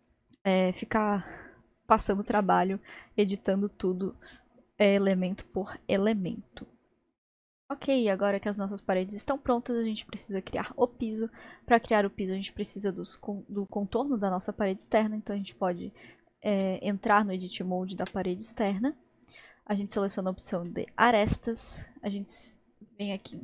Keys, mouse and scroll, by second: 0.4-5.6 middle drag, 7.6-11.0 middle drag, 15.5 click, 18.0 Tab, 18.6-20.2 middle drag, 20.2 scroll, 20.2-20.7 scroll down 1, 20.7-22.4 middle drag, 22.4-23.2 scroll up 2, 23.3-23.4 shift+middle drag.